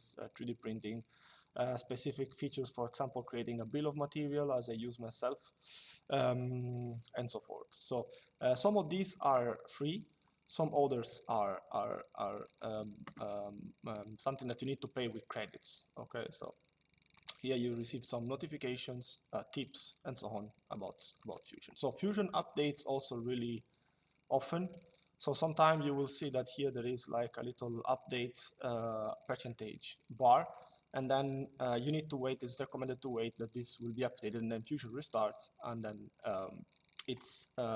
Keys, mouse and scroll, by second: 12.1 click, 16.9 click, 20.9 click, 24.1 click.